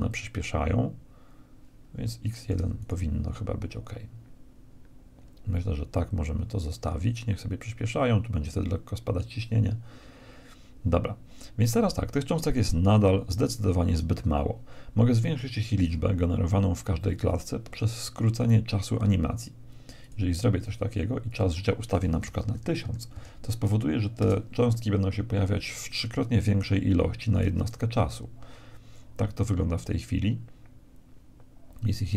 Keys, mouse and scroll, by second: 2.0-3.8 drag, 16.8 Escape, 19.6-22.8 drag, 22.4 0, 27.0 alt+a, 31.8 Escape.